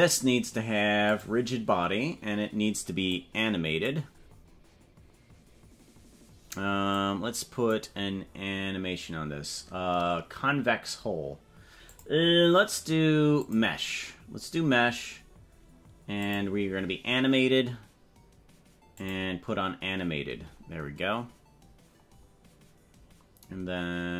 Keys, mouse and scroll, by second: 1.1 click, 3.1 click, 7.1 click, 13.3 click, 16.2 click, 19.0 click.